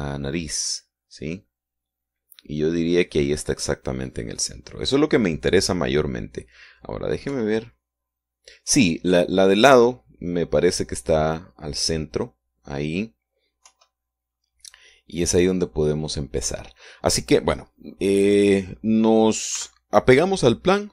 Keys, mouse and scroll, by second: 3.8-4.5 scroll down 1, 8.6 KP_3, 14.9 KP_1, 20.8 n.